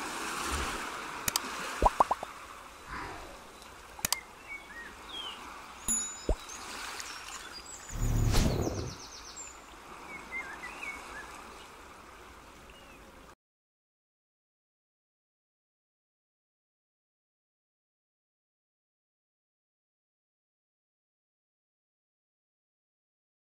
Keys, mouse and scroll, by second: 4.4 ctrl+z, 5.0 ctrl+z, 5.3 ctrl+z, 5.7 ctrl+z, 6.5 z, 10.9 Tab, 11.8 click, 14.3 click, 17.9 middle click, 20.8 click, 21.5 middle click.